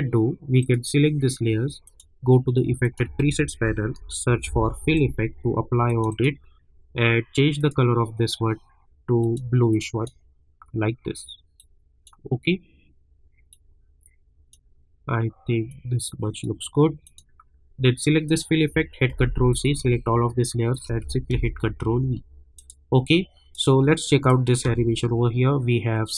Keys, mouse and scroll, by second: 0.6 click, 3.2 ctrl+a, 3.4-4.9 typing, 5.8-17.0 drag, 19.1 ctrl+c, 19.5 click, 20.7 shift+click, 21.3 ctrl+v, 22.5 click, 24.6 space.